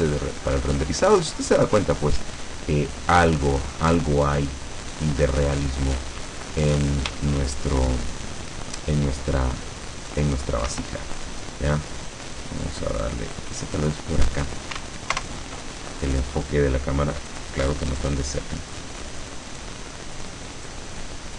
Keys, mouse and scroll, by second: 7.2-9.1 shift+drag, 9.5-9.9 scroll down 2, 10.8 Escape, 11.8-13.5 drag, 15.2 ctrl+alt+KP_0, 16.2 scroll down 1, 17.3 right click, 18.0 right click, 19.5 right click, 20.7 right click.